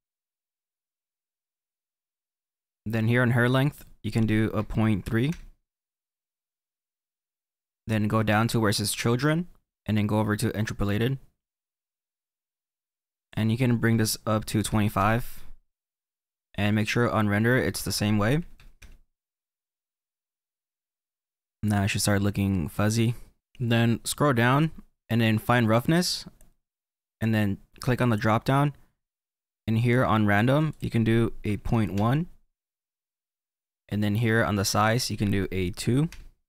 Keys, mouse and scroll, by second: 5.6 click, 11.4 click, 12.1-14.4 scroll down 2, 15.4 click, 18.7 click, 20.7 click, 21.1-22.3 middle drag, 22.3-23.4 scroll up 5, 32.4 click, 34.7 click.